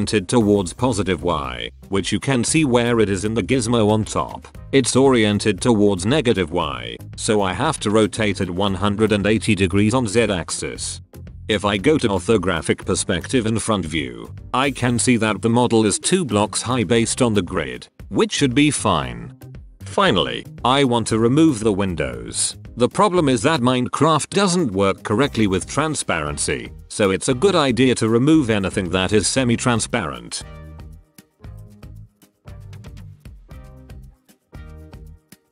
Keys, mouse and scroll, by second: 0.0-2.5 drag, 2.5-3.0 middle drag, 3.2 a, 6.5 a, 7.5 click, 9.1 r, 11.4 KP_5, 12.0-12.6 drag, 12.7 KP_1, 13.9 KP_3, 14.5 KP_1, 18.3 ctrl+KP_1, 19.7-20.8 drag, 20.8-21.8 middle drag, 22.2-22.6 middle drag, 24.3 click, 25.8-27.6 middle drag, 27.9 Tab, 28.3 middle click, 28.7 Tab, 29.9-30.7 middle drag, 31.2 shift+middle click, 31.4 shift+right click, 31.7 click, 31.9 shift+click, 32.3 shift+click, 32.4 shift+click, 32.6 shift+click, 32.8 shift+click, 33.4 x, 33.8 click, 34.0 click, 34.3 shift+middle click, 35.0 l.